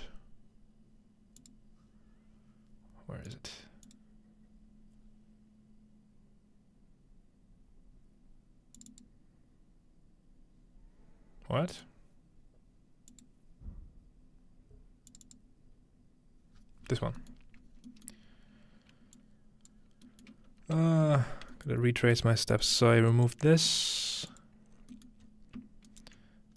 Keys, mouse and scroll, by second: 1.4 click, 3.3 click, 3.9 click, 8.8 click, 8.9 click, 11.7 click, 13.1 click, 15.1 click, 16.6-18.1 scroll down 3, 17.7 middle click, 18.0 middle click, 19.2-19.9 drag, 19.9-20.3 scroll down 1, 21.0 ctrl+s, 21.6-22.6 typing, 21.7-23.9 ctrl+middle drag, 22.5-23.9 drag, 22.8-24.6 scroll down 1, 23.1-23.9 ctrl+right drag, 25.2-25.9 scroll up 1.